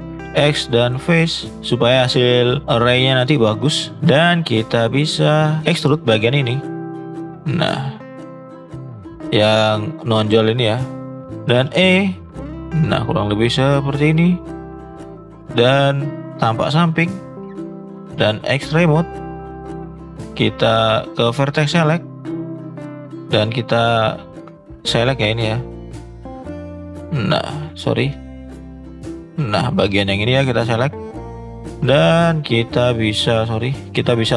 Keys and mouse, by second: 0.2 x, 1.9-2.4 middle drag, 7.0 shift+click, 8.0 shift+click, 8.4-8.8 shift+drag, 9.1 middle click, 10.6 middle click, 11.6 e, 14.6 middle click, 16.0 click, 16.8 shift+middle click, 18.6-24.7 drag, 25.1-25.6 middle drag, 25.9 shift+middle drag, 27.7 ctrl+z, 28.3-28.9 shift+drag, 31.3 click, 31.5 shift+middle click, 32.1 click, 33.3 ctrl+z.